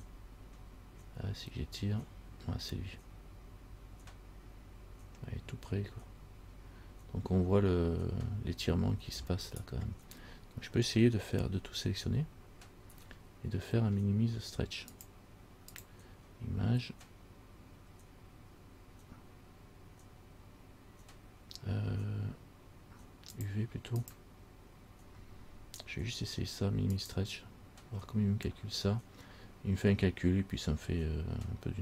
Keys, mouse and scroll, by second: 11.6 a, 12.2 a, 15.1 click, 15.9 click, 24.2 click.